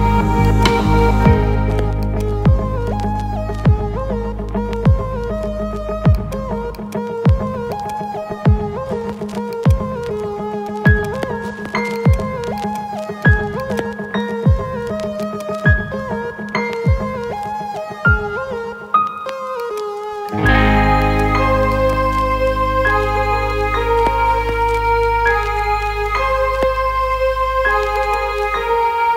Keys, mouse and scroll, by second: 0.5 click, 0.9 `, 2.0-2.8 alt+shift+middle drag, 3.4 g, 3.7 z, 6.2 shift+click, 6.7-7.7 alt+middle drag, 7.8-8.4 alt+shift+middle drag, 9.7-10.7 ctrl+alt+middle drag, 10.8-11.8 alt+shift+middle drag, 12.0 ctrl+alt+middle click, 12.7-15.0 alt+shift+middle drag, 15.3-16.0 ctrl+alt+middle drag, 16.7 shift+a, 20.3-21.0 alt+middle drag, 21.2-21.6 shift+middle drag, 24.4 ctrl+alt+KP_0, 26.0 n.